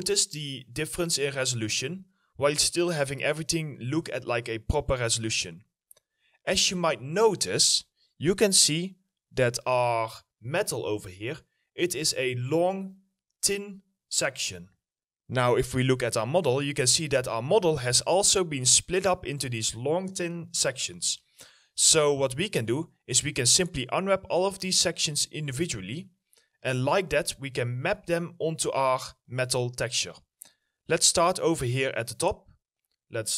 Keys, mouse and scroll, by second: 5.4 middle click, 16.4 middle click, 16.7-17.5 scroll up 1, 17.5 middle click, 18.2 alt+middle click, 20.7 alt+middle click, 21.0 alt+middle click, 25.3-25.7 scroll down 1, 25.8 middle click, 26.7 alt+middle click, 27.1 middle click, 27.6 alt+middle click, 29.4 alt+middle click.